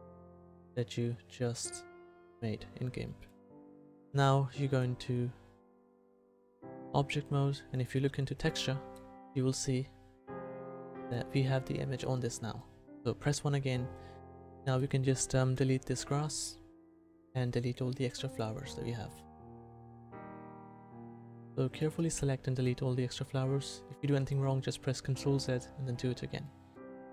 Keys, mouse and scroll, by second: 2.2-4.0 middle drag, 4.7-6.6 drag, 7.7-9.4 drag, 9.4 middle click, 13.2 KP_1, 16.0 Delete, 17.7 Delete, 21.9 Delete, 23.5 Delete.